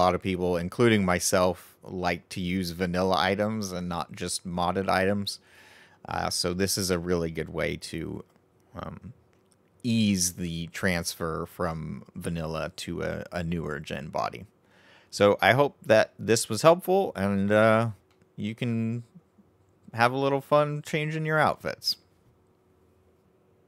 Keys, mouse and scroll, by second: 10.7-13.8 middle drag, 18.0-21.2 middle drag.